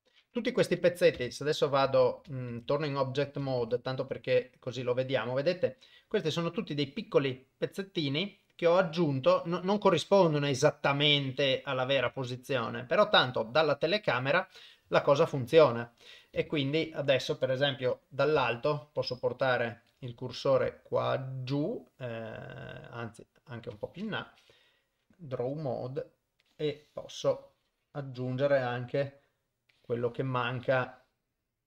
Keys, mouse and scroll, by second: 1.2 Tab, 1.9 Tab, 2.5 ctrl+Tab, 3.7 ctrl+Tab, 5.4-7.1 middle drag, 7.8-9.5 middle drag, 10.7-11.1 middle drag, 12.5 middle click, 13.3 KP_0, 15.0 KP_0, 16.0 middle drag, 16.5 shift+middle drag, 17.4 middle click, 17.9 KP_7, 18.6-19.1 ctrl+middle drag, 19.3-20.1 shift+middle drag, 21.4 shift+right click, 23.3 shift+right click, 24.3 KP_0, 25.1 ctrl+Tab, 26.5 click, 29.8-31.6 drag.